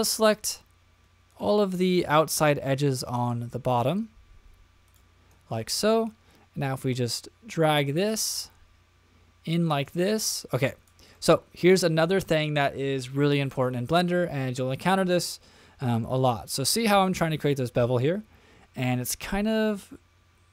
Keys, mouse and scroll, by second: 0.2 click, 1.3 shift+click, 2.1 shift+click, 3.0 shift+click, 3.8 shift+click, 4.8 shift+click, 6.0-10.9 drag, 11.1-15.4 middle drag, 16.0-20.5 middle drag.